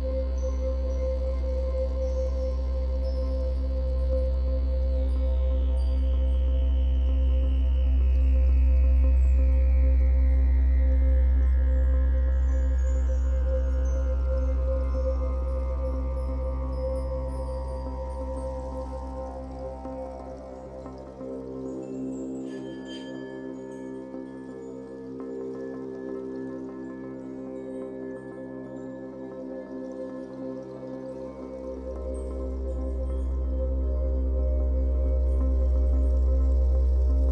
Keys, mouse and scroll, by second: 0.6-3.1 drag, 2.6 ctrl+z, 3.1-5.9 middle drag, 3.6 ctrl+z, 5.9 click, 6.3 shift+middle click, 7.2-10.1 drag, 10.1 middle click, 11.1-19.1 drag, 19.1-20.3 middle drag, 20.3-31.7 drag, 31.7 middle click, 32.5-37.3 drag.